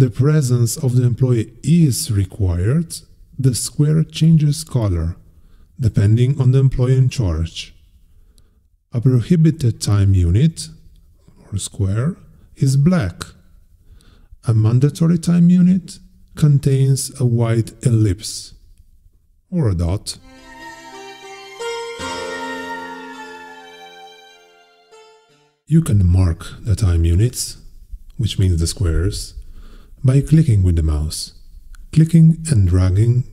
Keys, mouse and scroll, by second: 0.0-0.6 scroll down 2, 2.3-4.0 drag, 4.8-6.5 drag, 7.5-9.2 drag, 10.6 click, 11.9-13.5 drag, 14.7 click, 16.0-17.8 drag, 18.5-20.9 drag, 25.8 click, 27.9 click, 29.1 click, 29.7 click, 30.3 click, 32.4-33.3 drag.